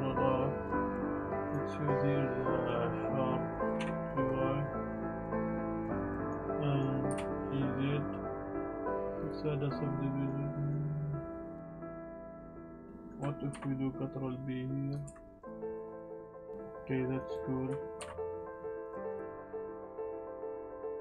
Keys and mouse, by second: 1.4 ctrl+r, 1.5-2.9 drag, 3.7 ctrl+z, 3.7 g, 3.8 y, 5.9 ctrl+z, 6.1 click, 6.7 click, 7.1 g, 7.1 z, 8.8 Tab, 8.8-9.3 drag, 8.8 g, 9.6-10.3 drag, 10.5 click, 12.0 ctrl+r, 12.8 ctrl+z, 12.9 click, 13.5 ctrl+b, 14.9 click, 15.0 Tab, 15.9-16.5 drag, 16.5 Tab, 17.1 click, 18.0 ctrl+b, 18.8 click, 19.1 click, 19.3 ctrl+b, 19.4 click, 19.5 Tab, 19.5 click, 19.7 click, 19.8 Tab, 19.8 click, 19.9 alt+click, 20.1 click, 20.2-21.0 typing, 20.6 click, 20.8 shift+click, 20.9 click.